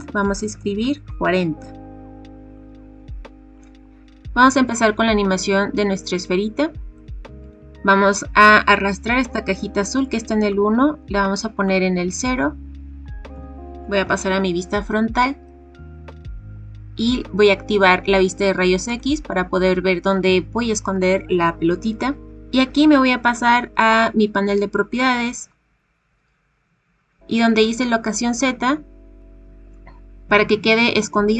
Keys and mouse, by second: 2.5-3.6 drag, 10.4-11.6 drag, 13.2 KP_1, 18.8 click, 28.4 click.